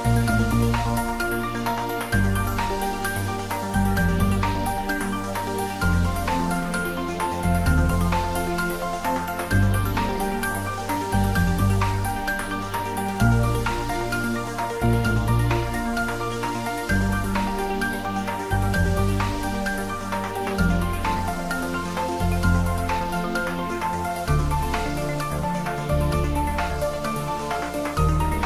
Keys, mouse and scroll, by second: 0.0 click, 6.2 click, 12.3 click, 16.0 click, 20.0 click, 23.4 click, 27.4 click.